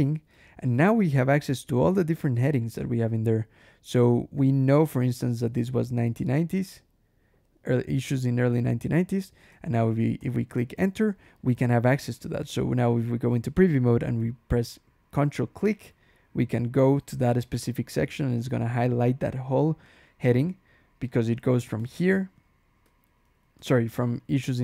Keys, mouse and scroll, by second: 1.2-2.0 scroll down 1, 2.2-2.9 scroll up 1, 4.5 scroll up 1, 5.6 1, 5.9 9, 9.3 Return, 10.0 Escape, 10.6 h, 12.3 ctrl+e, 15.5 ctrl+click, 19.2 scroll down 1, 19.7 click, 20.1 scroll up 1, 20.9 click, 21.1-22.1 typing, 23.4 Escape, 23.6-24.6 typing.